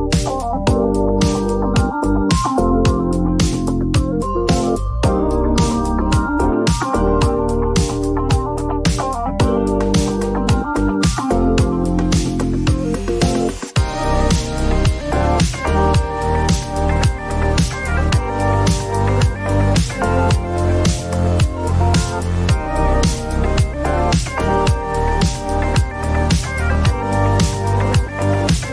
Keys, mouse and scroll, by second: 0.8-2.7 typing, 6.5 click, 9.3 click, 11.0-13.9 typing, 15.3 click, 15.7 click, 17.6 right click, 19.6 click, 21.6 click, 22.0-23.6 scroll up 2, 24.5 click, 26.4 click, 27.3 click, 28.4 click.